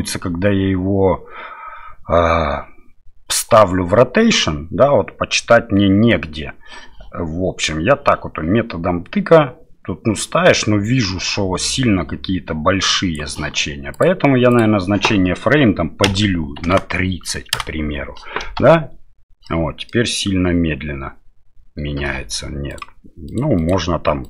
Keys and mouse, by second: 7.6-13.2 drag, 14.1-18.1 drag, 18.4 space, 19.5 middle click, 22.0 space, 22.8 click, 23.7-24.2 drag.